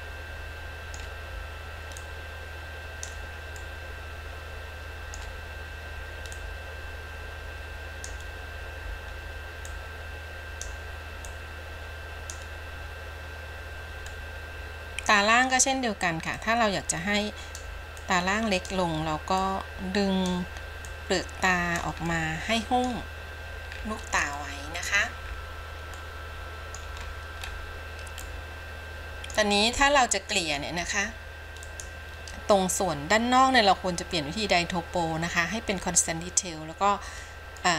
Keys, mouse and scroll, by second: 0.0-1.2 middle drag, 2.3-3.4 drag, 3.8-5.4 middle drag, 6.7-8.5 drag, 9.9 click, 11.5-12.6 drag, 14.3-15.7 middle drag, 16.6-17.8 drag, 18.3 click, 19.6 click, 21.1-22.0 drag, 22.3 middle click, 23.9 scroll down 3, 24.6 middle click, 25.5-26.2 scroll down 3, 26.2 middle click, 27.1-27.9 scroll up 3, 28.4 scroll up 1, 28.5-29.6 middle drag, 30.0 middle click.